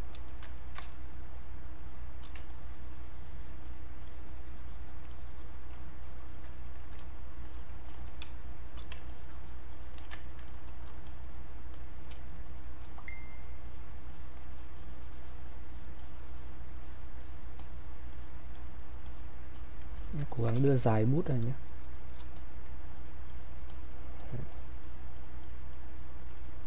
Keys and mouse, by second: 0.3 alt+click, 0.5 ctrl+right click, 0.8 ctrl+space, 1.2 ctrl+click, 2.3 ctrl+space, 2.5-5.1 alt+drag, 5.1 alt+click, 6.0 click, 6.7 ctrl+right click, 6.9 ctrl+click, 7.5 click, 8.2 space, 8.7 click, 9.1 alt+click, 10.2 ctrl+right click, 10.5 click, 11.0 alt+click, 11.8 click, 12.1 space, 13.0 click, 13.7 alt+click, 14.5-16.8 drag, 20.0 alt+click, 20.6 ctrl+space, 22.4 ctrl+click.